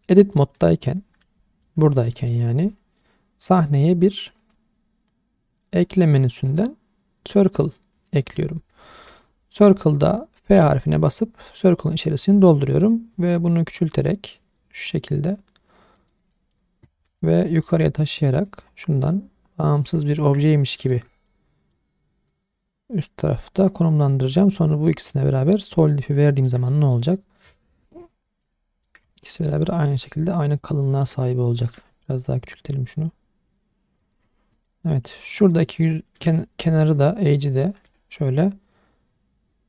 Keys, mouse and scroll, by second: 0.3-1.7 middle drag, 2.1 shift+middle click, 5.8-7.6 drag, 8.8 shift+middle click, 10.6 f, 13.1 s, 16.0 click, 16.3 middle click, 16.9 scroll up 2, 17.2 shift+middle click, 17.5 middle click, 17.8-18.5 scroll up 1, 18.5 click, 20.1 scroll up 1, 20.2 middle click, 21.3 middle click, 22.3 click, 24.3 middle click, 25.0 click, 25.8 middle click, 26.7 middle click, 27.8 shift+middle click, 28.4 middle click, 28.4-28.9 scroll down 1, 29.0-29.5 scroll down 2, 29.7-31.0 shift+middle drag, 31.3 scroll up 1, 31.7 s, 34.0 click, 34.4 scroll down 1, 34.7 shift+middle click, 35.5 click, 36.2 2, 37.8 s.